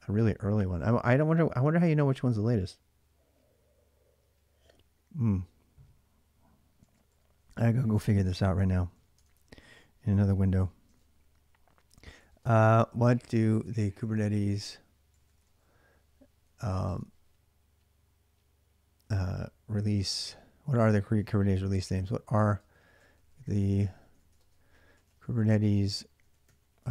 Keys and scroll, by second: 6.6-7.6 typing, 8.8 y, 9.0 Return, 9.5 ctrl+a, 10.1-17.1 typing, 19.3-26.9 typing.